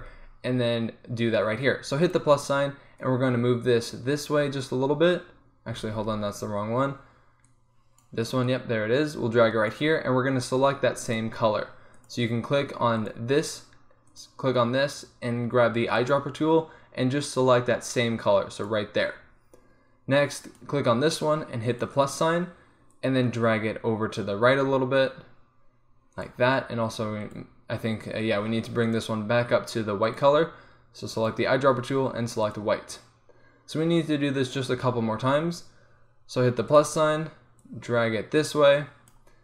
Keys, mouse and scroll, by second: 2.1-5.1 drag, 6.5 ctrl+z, 7.5-16.1 drag, 20.5-33.9 drag, 36.8-39.4 drag.